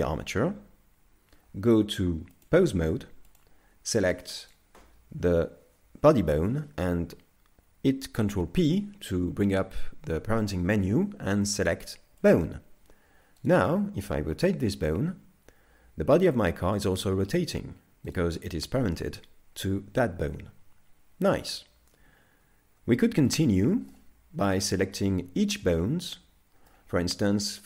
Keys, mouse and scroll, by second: 2.4 click, 3.4 click, 4.5 right click, 8.2 ctrl+p, 13.4 right click, 14.4 r, 22.0 z, 23.0 shift+middle click, 23.6 middle click, 24.5 right click, 25.1 right click, 25.6 middle click, 27.1 scroll up 2.